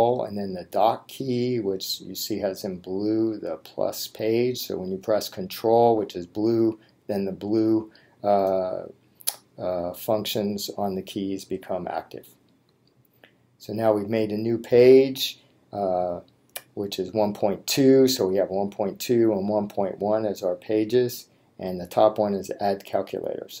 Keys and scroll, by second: 20.1 Right.